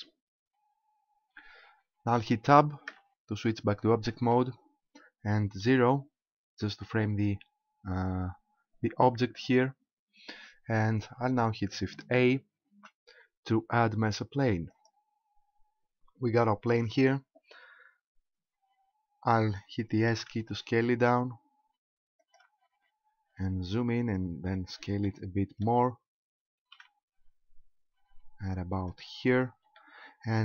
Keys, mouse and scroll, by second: 2.9 Tab, 5.7 KP_0, 8.1-9.6 scroll up 1, 12.8 shift+a, 20.1 s, 22.4 ctrl+click, 22.7-23.2 scroll up 2, 23.2-25.0 scroll up 8, 25.0 shift+middle click, 26.6 s, 28.9 ctrl+click, 29.2-29.8 scroll down 3, 29.8 shift+middle click.